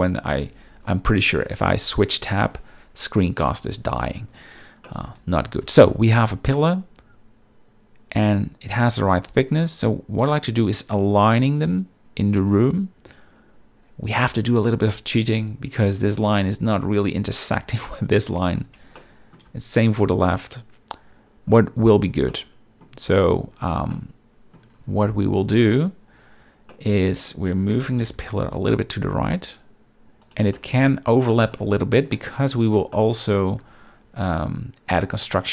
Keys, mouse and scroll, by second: 0.0 click, 0.4 n, 4.8 shift+middle drag, 19.0-19.3 shift+middle drag, 22.3-22.8 shift+middle drag, 23.9-24.5 middle drag, 26.7 middle click, 27.7 g, 28.0 x, 30.2 click, 30.5 middle click, 31.3 middle click, 32.1-32.5 middle drag, 32.5-32.8 scroll, 32.9-33.3 shift+middle drag.